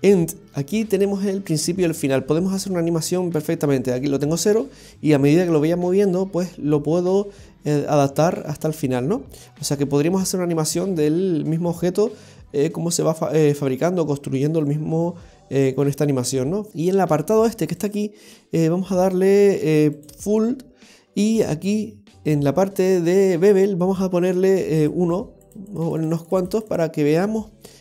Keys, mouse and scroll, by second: 4.4 click, 16.7 middle click, 16.7 scroll down 2, 17.8 click, 20.7-21.9 scroll down 7, 24.8 click, 25.4 click, 25.7-26.6 click, 25.9 click, 26.0 click, 26.7 click, 27.2 middle click.